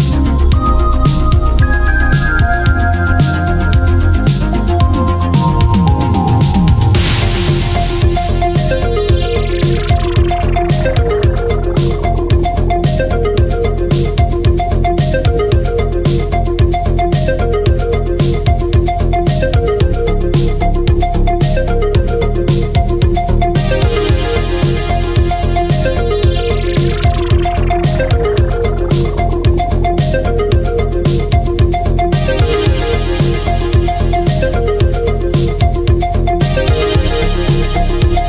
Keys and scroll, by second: 25.5 ctrl+z, 26.3 ctrl+z, 27.9 ctrl+z, 30.2 ctrl+z, 31.6 ctrl+z, 32.2 space, 34.1 ctrl+z, 34.5 ctrl+z, 34.8 ctrl+z, 35.1 ctrl+z, 35.3 ctrl+z.